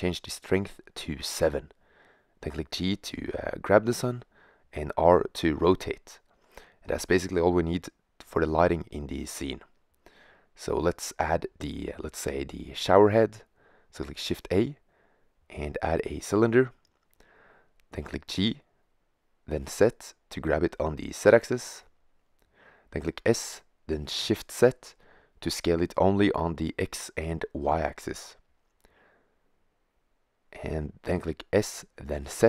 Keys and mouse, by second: 0.5 middle click, 1.9 g, 4.4 r, 5.9-7.4 drag, 7.4 r, 13.6 shift+a, 17.2 g, 20.8-22.3 middle drag, 22.3 s, 29.5 middle drag, 29.8 middle click, 32.1 s.